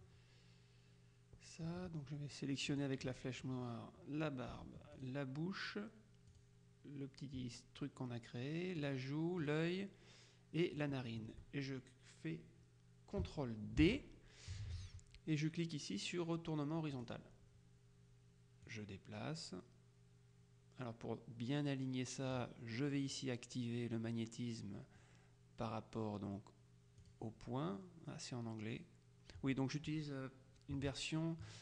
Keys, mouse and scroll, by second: 2.8 click, 5.0 shift+click, 6.4 click, 8.9 click, 10.8 click, 13.9 ctrl+d, 17.0 click, 18.8-22.9 drag, 27.1 click.